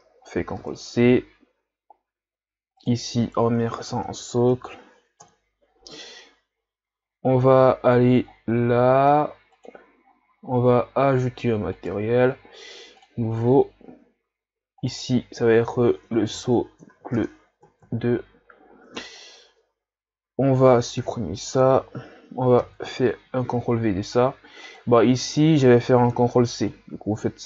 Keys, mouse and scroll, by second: 5.2-9.9 drag, 11.8-17.9 drag, 21.8 Delete, 22.6 ctrl+v, 24.8 click.